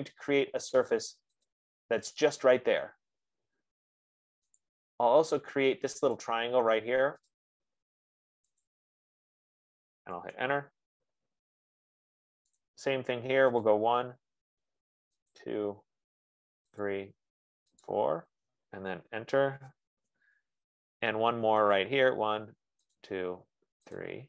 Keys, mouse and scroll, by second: 1.8 click, 5.0 click, 6.6 click, 7.8 click, 10.5 Return, 11.9-12.4 scroll, 13.1 right click, 14.1 click, 15.8 click, 17.3 click, 18.2 click, 20.7 Return, 22.3 click, 23.3 click.